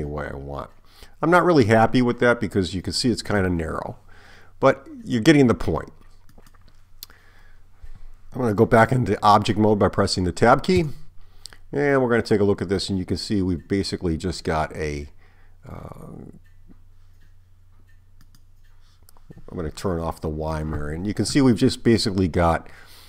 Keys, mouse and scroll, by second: 10.9 Tab, 18.3 click.